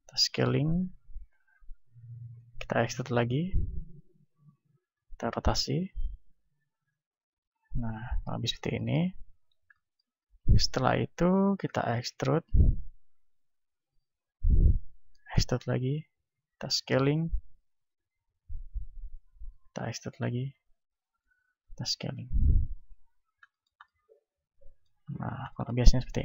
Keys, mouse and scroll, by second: 1.1-5.2 drag, 1.1 r, 2.4 e, 5.5 r, 6.9-9.6 drag, 8.7-11.6 middle drag, 11.6 e, 14.4-19.8 drag, 15.4 e, 16.6 s, 19.6 e, 20.5-22.4 drag, 21.2 s, 22.7 click, 23.0-26.2 middle drag, 26.0 ctrl+Tab.